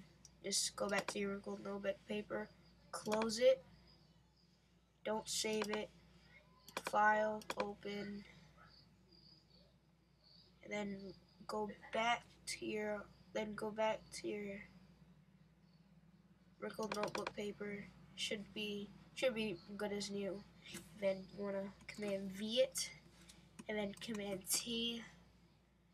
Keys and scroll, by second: 22.0 super+v, 24.0 super+t.